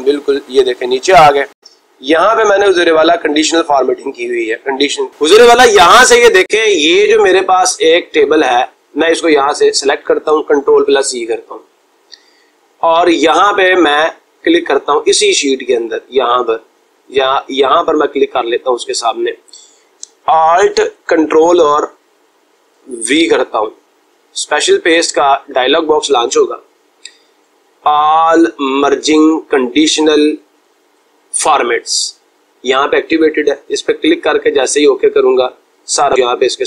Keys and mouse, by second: 19.0 click.